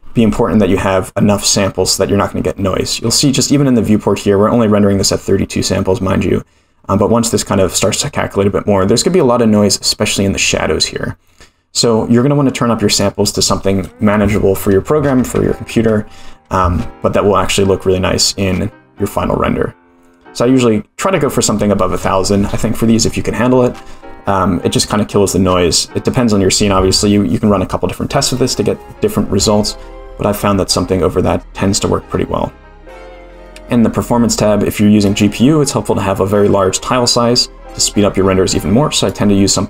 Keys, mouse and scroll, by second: 3.0 scroll up 6, 11.2-12.9 scroll down 6, 12.9-16.7 drag, 15.3 0, 19.9-23.0 scroll down 1, 30.7-31.3 scroll down 1, 31.3-33.3 scroll down 9, 33.3 click, 35.0 click, 39.0 click.